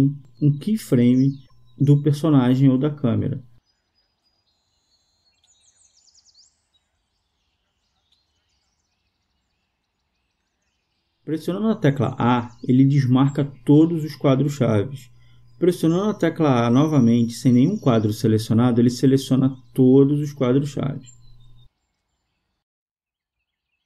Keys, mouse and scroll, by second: 2.4-3.9 drag, 8.5-9.5 drag, 12.0 a, 13.7 a, 16.4 a, 23.7 click.